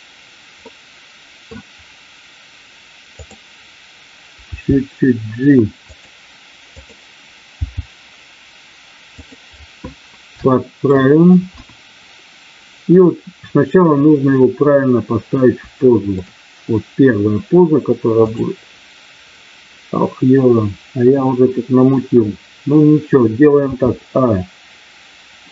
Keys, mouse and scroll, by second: 0.6 middle click, 3.1 click, 4.4 g, 7.4 g, 9.2 click, 10.4 shift+middle click, 11.4 KP_1, 15.7 shift+middle click, 18.2 click.